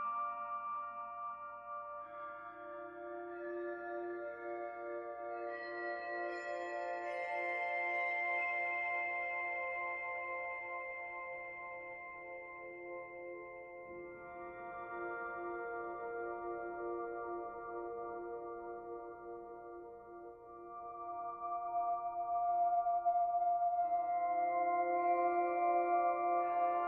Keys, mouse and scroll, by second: 0.8 click, 5.0 middle click, 7.0-8.0 scroll down 4, 8.0 click, 8.0-9.2 scroll down 3, 9.2-10.1 scroll down 1, 10.1-10.8 scroll down 1, 10.8 click, 13.3 middle click, 14.5 middle click, 16.1 r, 18.9 middle click, 19.6 r, 22.3 click, 23.2 middle click, 24.1 middle click, 24.8-25.4 scroll up 1, 26.0-26.3 scroll up 1.